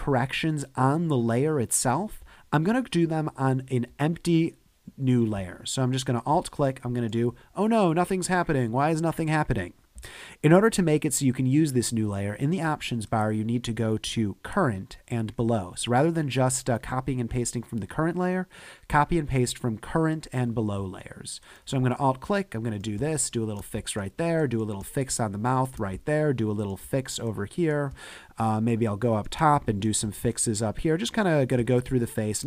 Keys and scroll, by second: 23.0 space, 24.9 space, 27.9 space, 31.6 space.